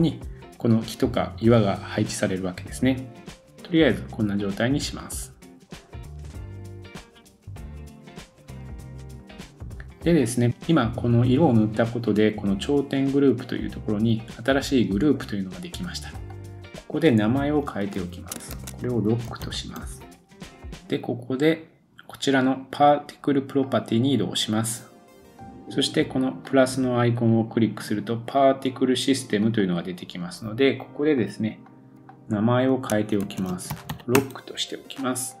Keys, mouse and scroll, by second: 16.2 middle click, 16.3-23.7 drag, 20.3 super+s, 23.7-26.4 middle drag, 26.4-29.5 drag, 29.5 middle drag, 29.6-31.2 drag, 31.2 middle click, 31.6 click, 32.0 middle click, 32.9-35.4 shift+drag.